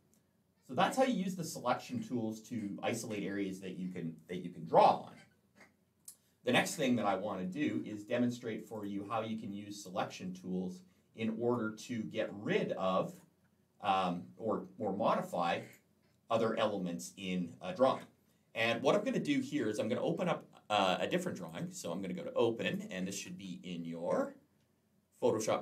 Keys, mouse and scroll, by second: 1.4-2.7 scroll down 2, 3.7-4.0 scroll up 2, 6.3-7.1 scroll down 2, 8.6 click, 9.3 scroll down 2, 9.9-10.6 scroll up 1, 10.9 scroll down 1, 12.9 click, 15.4 click, 21.3 click, 22.5 click.